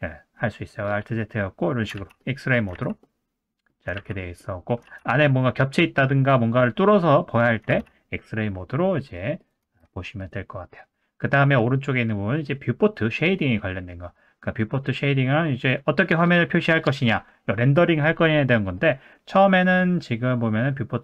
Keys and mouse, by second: 1.2 middle click, 2.1 alt+z, 2.2 middle click, 2.7 alt+z, 3.0 middle click, 3.9 alt+z, 4.2 middle click, 4.9 alt+z, 5.1 middle click, 7.1 middle click, 7.7 alt+z, 8.9 middle click, 9.6 Tab, 10.2 click, 16.4 middle drag, 18.5 middle click.